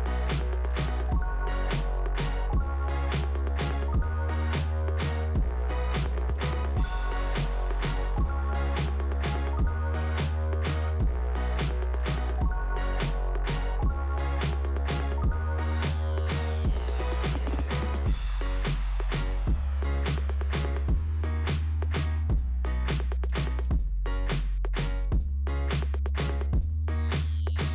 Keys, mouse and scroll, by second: 2.9 middle click, 3.8 scroll up 2, 7.5-8.7 scroll down 1, 9.6 click, 11.8 click, 14.7 click, 16.3 click, 18.2 click, 21.5 click, 22.4 click, 23.1 scroll down 2, 25.2 click, 25.7 double click.